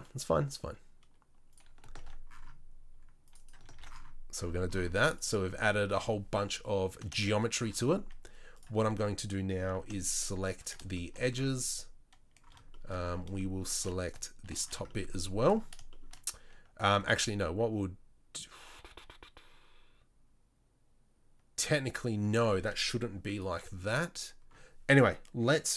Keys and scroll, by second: 1.9 ctrl+r, 3.7 ctrl+r, 17.1 ctrl+r.